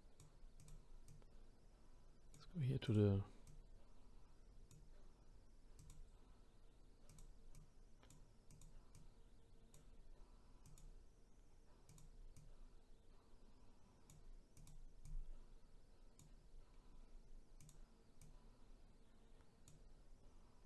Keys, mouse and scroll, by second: 0.6 click, 1.1-3.0 drag, 3.5 click, 5.8 click, 7.1 click, 7.5-8.6 drag, 9.0-10.8 drag, 11.9 click, 12.3 click, 14.5 click, 15.0 click, 16.9-17.6 scroll down 2, 17.6 click.